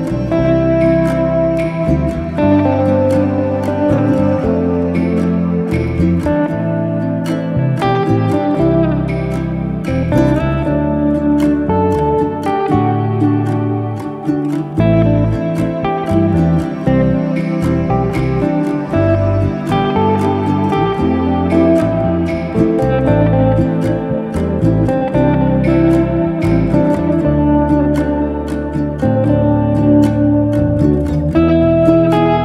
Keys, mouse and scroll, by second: 0.3 Tab, 1.6 click, 2.2 click, 8.0 click, 13.5 click, 14.1 click, 23.4 click, 24.4 s, 26.9 ctrl+z, 27.7 click, 28.2 click, 29.2 click.